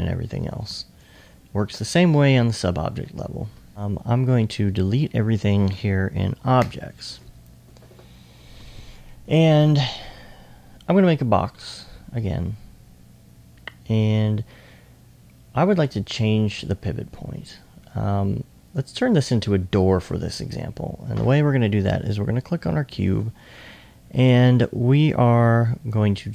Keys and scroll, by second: 0.7 s, 1.9-4.0 typing, 15.9 e.